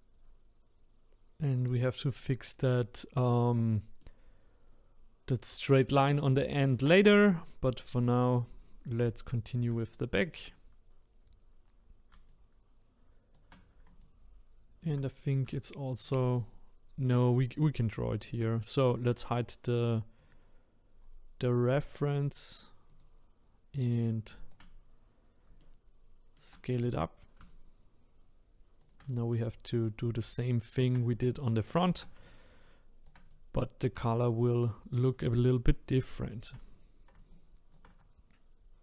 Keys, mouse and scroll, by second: 4.0-9.3 middle drag, 9.3-9.9 scroll down 1, 9.9-12.3 shift+middle drag, 12.3-17.1 shift+right drag, 17.1 click, 20.2 click, 21.0-22.8 scroll down 3, 22.9 click, 24.0 shift+right click, 24.8-25.6 scroll up 5, 25.6-26.7 shift+middle drag, 26.7-27.5 scroll down 1, 27.5-38.8 shift+right drag.